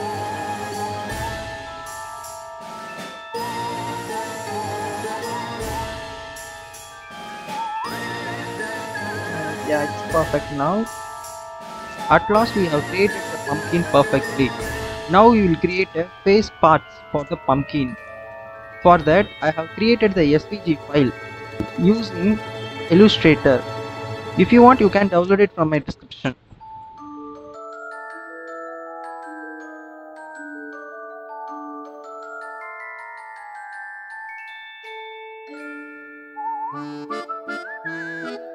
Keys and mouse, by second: 0.6 click, 1.0 s, 1.6 click, 1.9 space, 2.0 space, 2.1 alt+click, 2.2 click, 2.7 click, 3.0 Tab, 3.3 click, 3.9 click, 4.3 click, 4.5 Tab, 4.6 Tab, 4.8 click, 5.4 Tab, 5.6 Tab, 5.8 Tab, 5.8 click, 6.4 alt+shift+click, 7.7 shift+click, 7.9 shift+click, 8.4 shift+click, 8.7 s, 9.9 Tab, 10.1-12.9 drag, 13.8 click, 14.7-15.2 drag, 31.5 a, 31.6 h, 32.2-34.1 drag, 35.1-35.7 drag, 36.7 Delete, 37.0 click, 37.3 click, 37.5 Delete, 37.8 Delete.